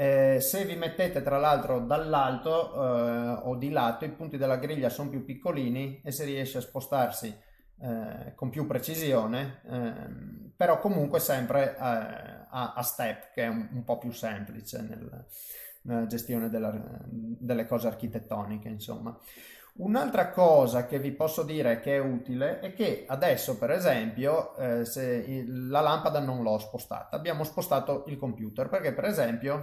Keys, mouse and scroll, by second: 0.1 middle click, 1.0 KP_7, 3.4 g, 8.8 middle click, 10.6 middle click, 11.1 shift+middle click, 11.7 middle click, 13.2 middle click, 16.1 click, 16.5 middle click, 18.1 shift+middle click, 18.6 middle click, 19.9 click, 20.3 middle click, 20.8 middle click, 21.2 middle click, 23.7 middle click, 25.8 middle click, 26.7 g, 28.5 middle click, 29.3 click.